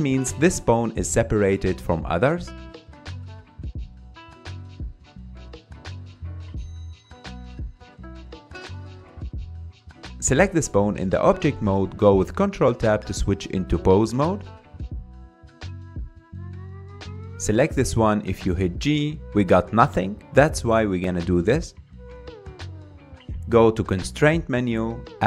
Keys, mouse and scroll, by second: 0.3 click, 1.1-1.6 scroll down 1, 1.6 g, 3.2 click, 3.6 g, 5.1 click, 5.9 g, 8.5-9.1 scroll up 2, 9.1 shift+middle click, 9.8-10.1 scroll down 2, 10.1 shift+middle click, 10.8 click, 12.3 Tab, 14.8 click, 16.4 scroll down 2, 16.9-19.7 shift+middle drag, 19.7 g, 24.8 click.